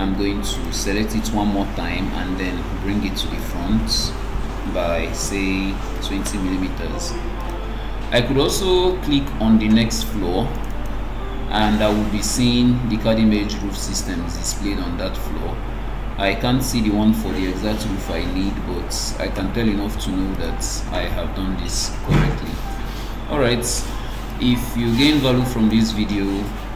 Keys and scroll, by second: 1.7 ctrl+d, 6.5 Return.